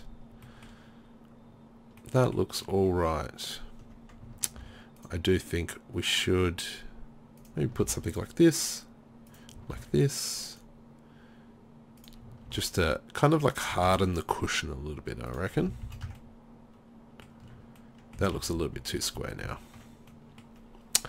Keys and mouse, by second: 4.5 ctrl+r, 7.5 click, 7.8 ctrl+r, 9.8 ctrl+r, 12.5 ctrl+r, 13.9 ctrl+r, 15.7 z, 15.9 z, 16.1 Tab, 17.6 Tab, 18.4 ctrl+z, 18.6 ctrl+z, 18.8 ctrl+z, 19.0 ctrl+z, 19.3 ctrl+z, 19.5 ctrl+z.